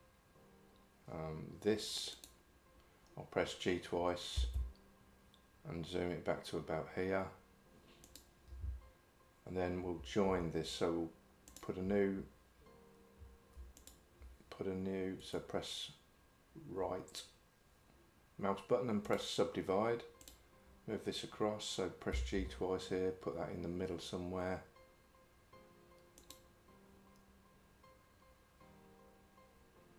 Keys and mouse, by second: 2.2 click, 4.4 g, 13.8 shift+click, 15.2-19.2 right drag, 22.2 g.